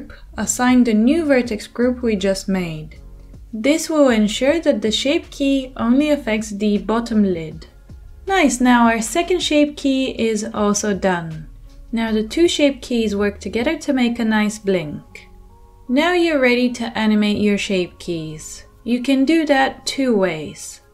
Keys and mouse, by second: 13.4-14.3 middle drag, 14.3-16.7 drag, 16.7-17.4 middle drag, 17.4-20.8 drag.